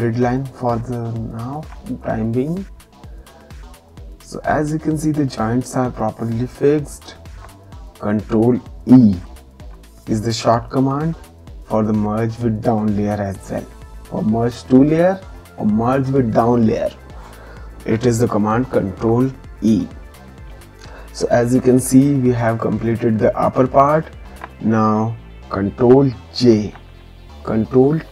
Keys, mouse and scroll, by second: 0.3 ctrl+click, 9.0 ctrl+e, 26.3 ctrl+j, 27.8 ctrl+t.